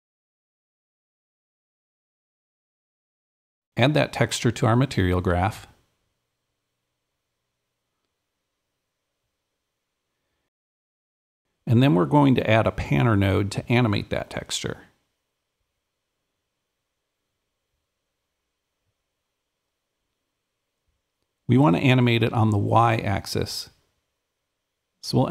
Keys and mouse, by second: 0.0-2.1 super+drag, 2.2-10.5 super+drag, 12.0-13.0 super+drag, 13.0 super+right click, 14.0 super+p, 14.0 super+click, 16.0 super+a, 16.2-21.7 super+drag, 23.2-25.3 super+drag.